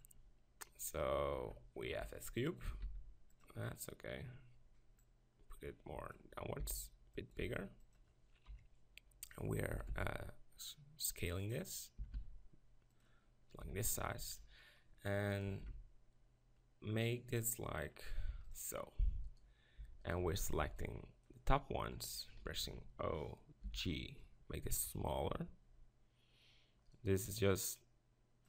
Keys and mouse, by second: 1.9 KP_1, 2.7 s, 5.0-6.7 drag, 6.7 s, 7.5 s, 8.0 click, 8.5 KP_7, 9.7 s, 11.5-13.6 drag, 12.0 s, 13.6 Tab, 15.6 ctrl+r, 18.8 click, 19.8 b, 20.2 z, 20.6 b, 22.6 o, 23.6 g, 26.9-28.4 right drag, 27.3-28.4 drag.